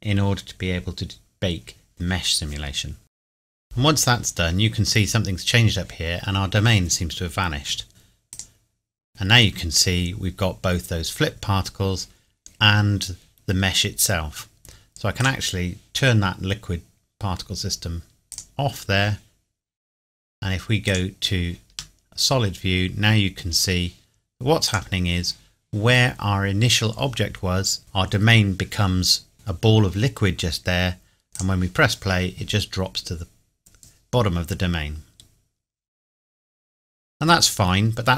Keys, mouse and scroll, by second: 8.3 click, 10.2 scroll down 1, 15.3 click, 18.3 click, 20.9 click, 21.7 scroll up 1, 22.0 middle click, 24.7 click, 29.3 middle click, 31.3 click.